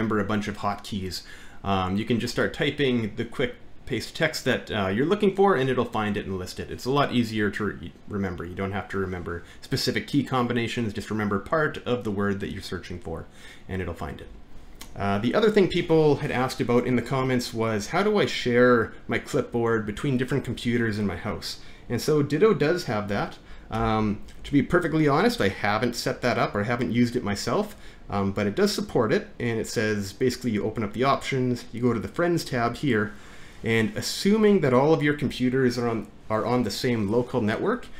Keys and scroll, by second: 23.8 alt+`, 32.2 typing.